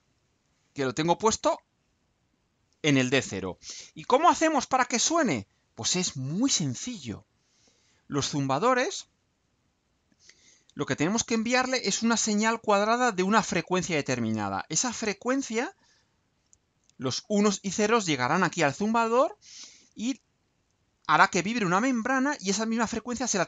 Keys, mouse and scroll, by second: 4.9 click, 6.2-8.3 right drag.